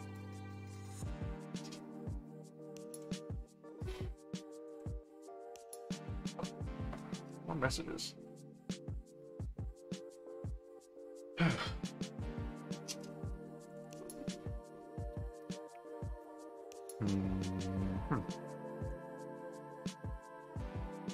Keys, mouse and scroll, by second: 0.1 click, 2.8 ctrl+Tab, 4.7 ctrl+Tab, 13.6 ctrl+click, 13.8 ctrl+s, 14.8-17.2 middle drag, 17.6 middle click, 18.5 ctrl+click, 18.8 ctrl+Tab, 20.6 right click.